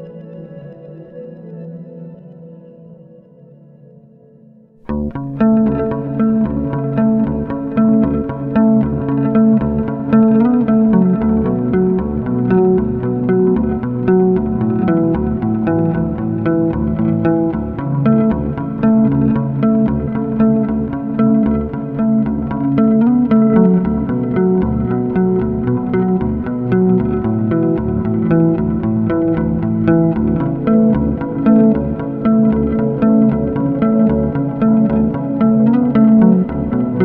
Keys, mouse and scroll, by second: 0.1 ctrl+alt+middle click, 1.2 alt+middle click, 1.9 middle click, 2.8 ctrl+alt+middle click, 4.1 ctrl+alt+middle click, 5.3 middle click, 6.1 click, 6.7 scroll, 7.2 m, 8.2 scroll, 9.2-10.4 scroll, 9.4 click, 11.8 click, 13.7 click, 15.8 click, 18.2 click, 19.5 click, 19.7 click, 22.8 click, 25.9 click, 30.5 click, 31.5 click, 34.9 click.